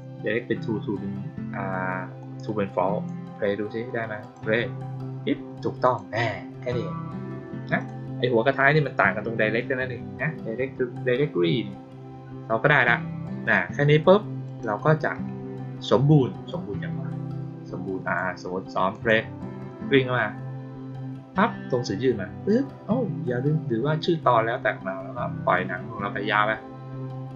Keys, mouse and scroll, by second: 2.1 click, 4.1 click, 5.7 click, 7.7 click, 14.4 click, 16.4-18.1 drag, 18.8 click.